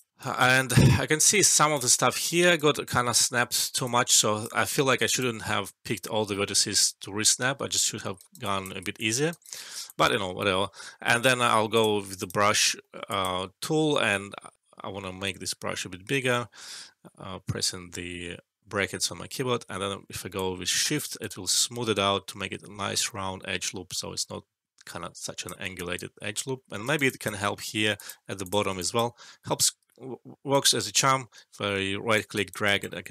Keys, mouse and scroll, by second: 0.1 alt+right click, 0.5 alt+middle click, 1.3-1.9 right click, 2.1 ctrl+z, 2.5 right click, 3.0 ctrl+z, 3.4 alt+middle click, 3.8-4.4 alt+click, 4.7 alt+middle click, 4.9 alt+right click, 5.6-6.2 alt+click, 6.4 alt+middle click, 7.8 alt+middle click, 8.1 alt+right click, 8.4 alt+click, 8.9 alt+click, 9.3 alt+right click, 9.8 alt+click, 10.5 alt+middle click, 10.9 scroll down 1, 11.7 click, 12.8 alt+middle click, 13.1 alt+click, 15.2 Num_Lock, 15.2-17.6 typing, 18.9 [, 20.3-25.5 shift+drag, 26.1 alt+middle click, 26.8 alt+right click, 27.0 alt+click, 27.3 alt+middle click, 27.9 shift+click, 29.2 ctrl+z, 30.5-32.9 right drag, 32.3 alt+click, 32.6 alt+right click.